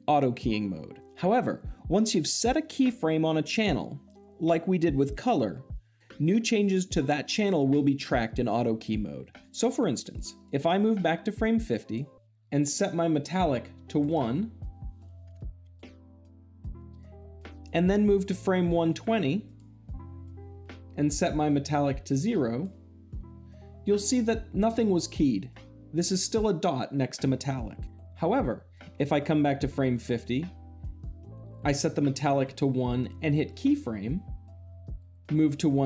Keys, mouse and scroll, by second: 10.3-11.3 drag, 13.0-14.1 drag, 17.5-18.5 drag, 21.9-22.9 drag, 30.8-31.9 drag, 33.4 click.